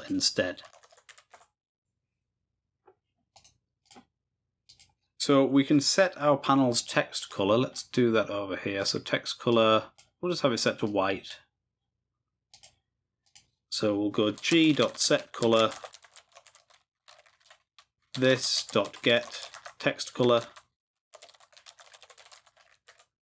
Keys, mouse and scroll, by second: 3.8 click, 4.0 click, 7.2 click, 8.8 click, 9.5 click, 10.9 click, 12.5 click, 13.3 click.